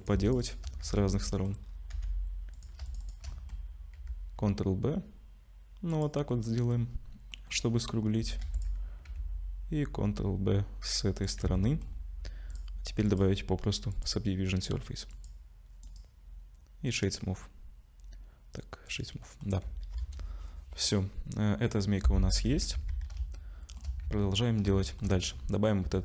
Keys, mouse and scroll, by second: 0.0 click, 0.3 alt+shift+click, 0.6 click, 0.8 f, 1.0 middle click, 1.6 scroll up 4, 1.9 2, 2.5 click, 2.9 alt+shift+click, 3.2 alt+shift+click, 3.3 middle click, 4.0 ctrl+b, 6.3 middle click, 6.8 scroll down 4, 7.3 middle click, 7.8 scroll up 1, 8.1 2, 8.4 3, 8.6 click, 9.1 ctrl+b, 11.4 Tab, 11.6 middle click, 12.5 click, 13.1 click, 15.8 right click, 19.2 middle click, 20.0 KP_0, 21.6-22.3 scroll down 4, 22.3-22.6 scroll down 1, 22.8 ctrl+s, 23.3 shift+middle click, 24.0 z, 25.0 shift+middle click.